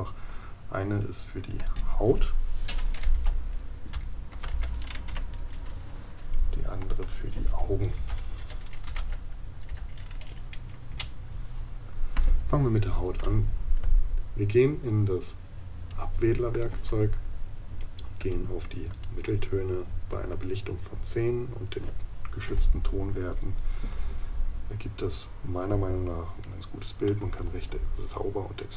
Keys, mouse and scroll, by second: 26.4 right click.